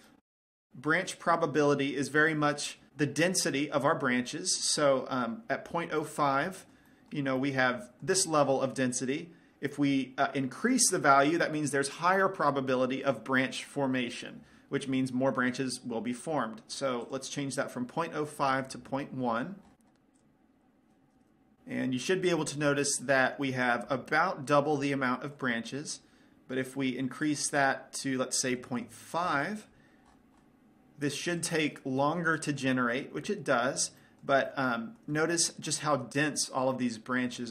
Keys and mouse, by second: 6.6-9.0 middle drag, 9.0 click, 9.1-13.3 middle drag, 17.6-21.0 drag, 23.0-24.3 middle drag, 24.6-27.8 middle drag, 27.8-29.5 drag, 32.8-33.8 drag, 34.6 middle click, 35.8 middle click, 36.5 middle click.